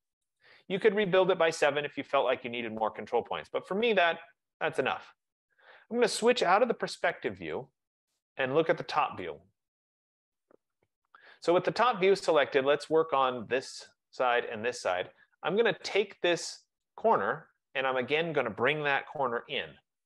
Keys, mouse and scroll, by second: 0.6 click, 3.3-4.1 scroll, 4.6-5.1 scroll, 7.7 click, 7.8 click, 9.2 click, 9.7 click, 10.7-11.0 scroll, 12.5 click, 14.0 shift+click, 16.9 click, 19.0-19.4 typing.